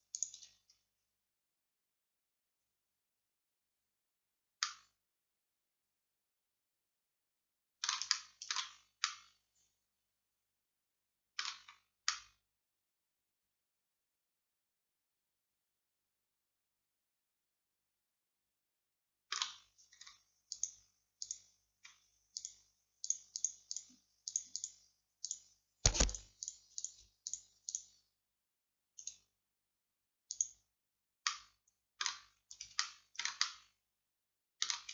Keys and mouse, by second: 1.9 middle click, 5.4-11.2 middle drag, 11.8-13.3 middle drag, 20.0-29.1 middle drag, 31.3-32.6 middle drag, 32.9 middle click.